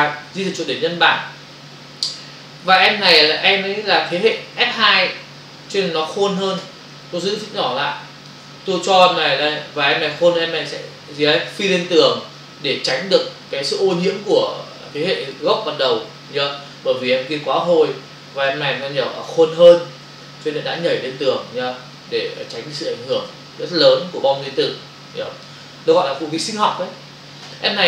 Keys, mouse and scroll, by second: 3.1 right click, 4.1 click, 7.0 shift+click, 8.7 click, 10.6 click, 12.4 shift+click, 13.5 click, 14.4 click, 18.0 Return, 20.7 click, 22.5 shift+click, 23.7 Return, 24.4 click.